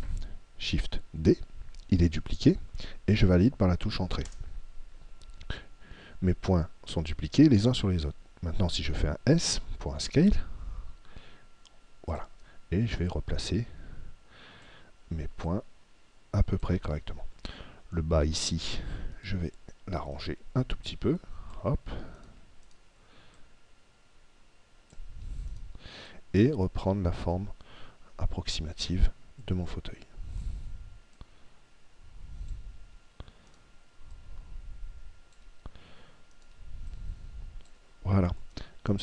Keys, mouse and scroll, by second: 1.4 shift+d, 10.3 s, 12.2-14.9 drag, 15.4 click, 19.4-24.4 right drag, 20.9 click, 23.4 click, 25.4 right click, 26.1 click, 28.8 right click, 29.4-33.0 drag, 33.5 right click, 34.3 click, 36.4 right click, 36.9 click, 38.6-39.0 middle drag.